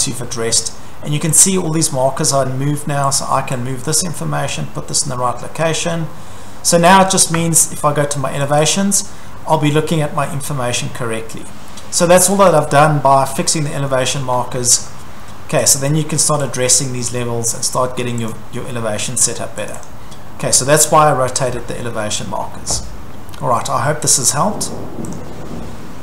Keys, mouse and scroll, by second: 0.1-1.4 scroll, 1.4 click, 2.4-3.2 scroll, 3.2 click, 3.9 click, 5.6 click, 6.9-7.2 scroll, 7.4 Escape, 8.5 click, 8.7 click, 9.9 scroll, 10.2 Escape, 12.5 click, 12.6 click, 13.6-14.3 scroll, 14.2 Escape, 15.7 click, 17.5 click, 18.3 click, 19.7 click, 19.9 click, 23.6 middle click, 23.7-24.9 scroll, 24.9-25.2 scroll, 25.1 middle click, 25.1 click, 25.3 middle click.